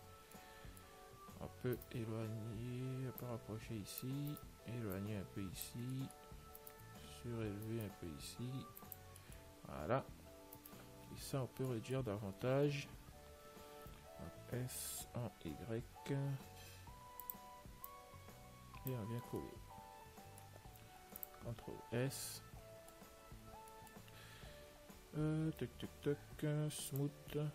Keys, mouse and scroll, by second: 0.6-2.5 middle drag, 2.0-3.7 right drag, 3.5-7.0 drag, 4.6-6.8 right drag, 6.2-7.8 middle drag, 6.9-9.8 right drag, 9.5-11.4 middle drag, 10.9-12.6 right drag, 11.5 l, 12.0-14.5 middle drag, 18.1 click, 19.7-21.6 middle drag, 21.3 ctrl+s, 22.6-27.2 middle drag, 23.4 Tab, 27.2 click.